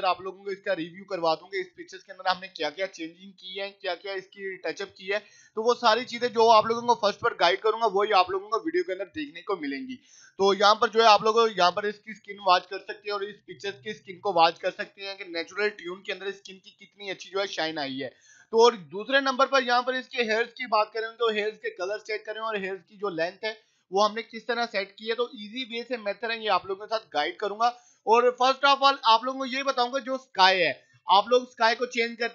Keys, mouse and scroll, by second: 10.4-10.9 scroll up 1, 12.9 click, 13.1 scroll up 1, 15.0 scroll up 1, 15.3-18.1 drag, 28.1 scroll down 1, 28.7-29.3 scroll down 2, 29.4 click, 29.7-30.6 scroll down 1, 31.0 click, 31.1-32.0 scroll down 1.